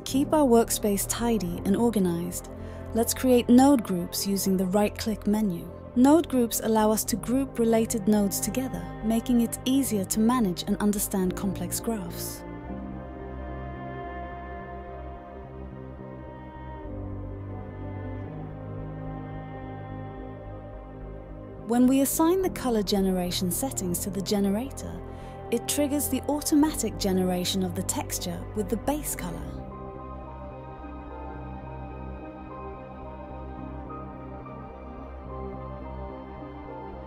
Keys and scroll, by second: 4.3-5.5 typing, 20.3-21.3 typing, 21.4 Return, 36.0-37.0 typing.